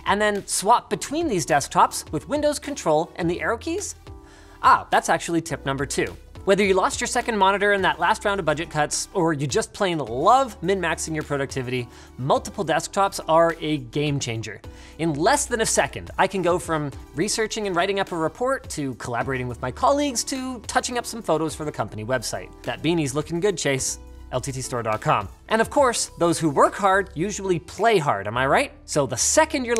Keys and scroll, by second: 3.4 ctrl+super+Left.